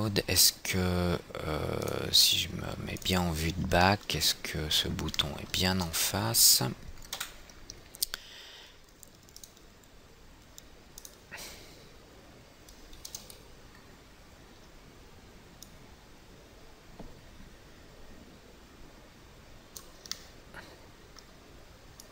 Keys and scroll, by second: 7.7 F3.